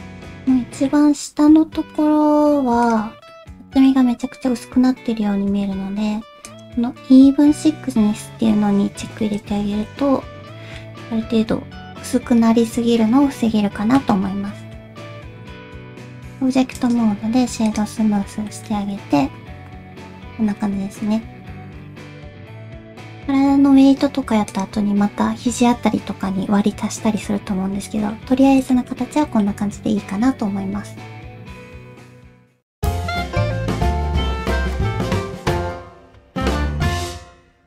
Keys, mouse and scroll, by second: 0.3 middle click, 3.3 middle click, 8.5 middle click, 9.2 shift+middle click, 9.6 alt+z, 9.8 middle click, 11.1 alt+z, 11.1 middle click, 14.3 middle click, 15.2 alt+z, 15.6 alt+z, 15.6 Tab, 18.3 shift+middle click, 18.6-21.0 middle drag, 22.0 alt+z, 27.2 middle click, 28.3 alt+z, 28.7 middle click, 29.2 middle click.